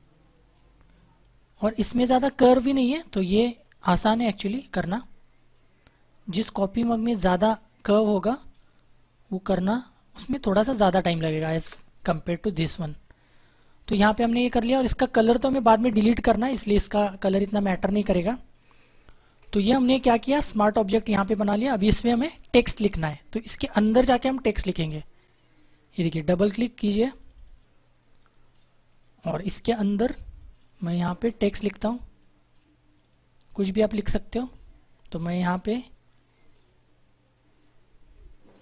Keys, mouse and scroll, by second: 2.5 click, 11.5 Return, 18.5 ctrl+-, 19.2 ctrl+=, 27.1 click.